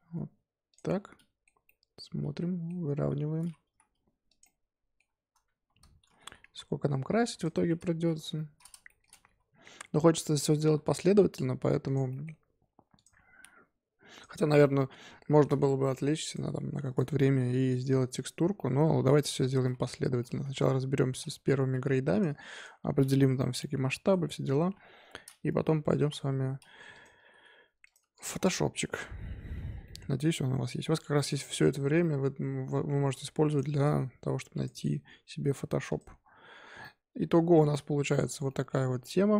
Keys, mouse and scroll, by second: 0.8-2.8 middle drag, 2.8 g, 4.4-5.5 middle drag, 5.5 Tab, 6.0 a, 6.3 s, 7.5 Tab, 8.2 scroll up 1, 8.3-10.5 middle drag, 10.5 g, 12.1 middle click, 12.9 click, 13.2 g, 14.4 scroll down 4, 14.6-15.6 middle drag, 15.6 Tab, 15.9 middle click, 16.2 click, 17.1 shift+middle click, 18.1 click, 18.5 middle click, 19.2 l, 19.6-20.9 middle drag, 20.9 s, 22.5 click, 23.3 l, 23.6-24.7 middle drag, 24.7 KP_7, 25.9 s, 27.1 s, 28.0 Tab, 28.1 click, 28.3 scroll down 3, 28.4-29.7 middle drag, 29.7 scroll down 4, 29.8 middle click, 30.6 KP_5, 30.9 middle drag, 31.2-32.0 scroll up 3, 32.0-33.1 middle drag, 33.1 scroll up 3, 33.4 click, 34.5 click, 35.8 click, 36.5 scroll down 4, 36.8-38.2 middle drag, 38.2-39.0 scroll up 8, 38.4-38.8 middle drag, 39.0-39.3 middle drag.